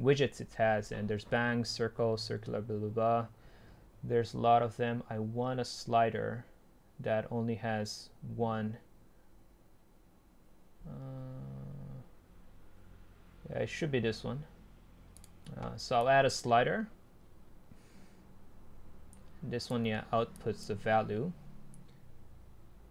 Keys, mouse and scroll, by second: 0.0-2.0 scroll up 2, 2.0 scroll up 1, 5.8-7.7 scroll down 2, 7.7-8.9 scroll down 1, 8.9 scroll down 1, 11.9-13.1 scroll down 2, 13.1-13.9 scroll down 1, 13.9 scroll down 1, 16.1-18.4 middle drag, 18.4-18.8 scroll up 2, 19.7-22.9 middle drag.